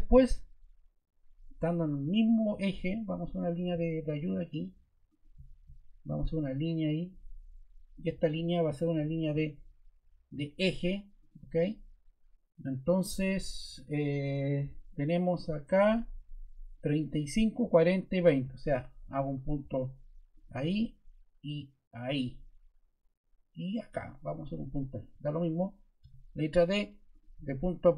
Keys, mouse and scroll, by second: 25.1 ↺, 26.0 d.